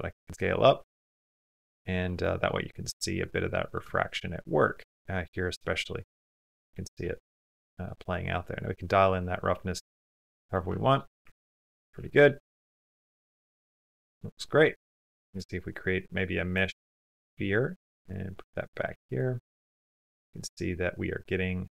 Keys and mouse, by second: 0.0 s, 1.3 middle click, 1.5 click, 2.0 middle click, 2.0 click, 2.4 middle click, 2.6 middle click, 3.8 shift+middle click, 4.1 middle click, 4.6 middle click, 6.0-7.0 shift+middle drag, 7.1 click, 7.2 middle click, 7.5 click, 7.8 middle click, 10.5 shift+middle click, 11.1 ctrl+middle click, 11.4 shift+middle click, 12.0 shift+middle click, 15.1 shift+a, 16.7 middle click, 17.1 g, 17.8 s, 18.8 g, 20.1 middle click, 20.3 middle click, 20.5 middle click, 20.7 middle click.